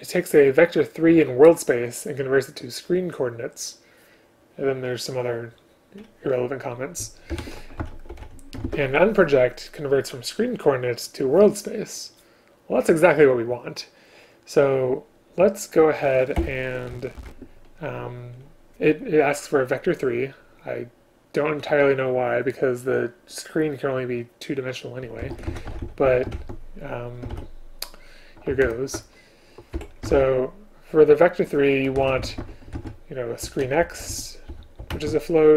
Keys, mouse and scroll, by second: 7.4 ctrl+BackSpace, 8.7 ctrl+q, 16.4 Return, 17.2 ctrl+p, 27.4 ctrl+p, 28.7 alt+Return, 29.8 Escape, 30.1 ctrl+p, 34.5 Return, 35.0 space.